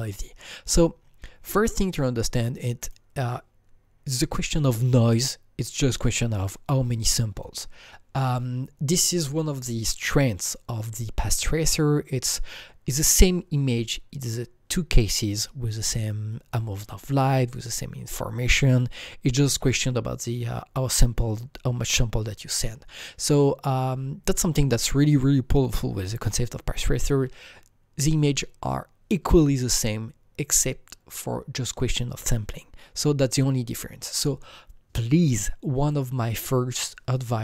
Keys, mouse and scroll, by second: 0.6-2.1 scroll down 7, 2.1-2.8 scroll down 2, 2.8 click, 16.3 click, 16.3-17.1 scroll down 2, 16.3-22.1 drag.